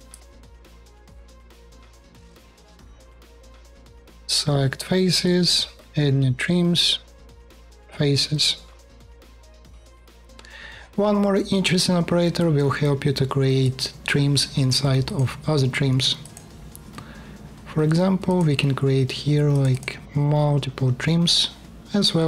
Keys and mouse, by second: 0.9 BackSpace, 1.6 alt+click, 2.5 3, 2.8 space, 2.9 KP_1, 3.5 alt+click, 7.5 click, 8.1-9.3 drag, 21.3-22.2 drag.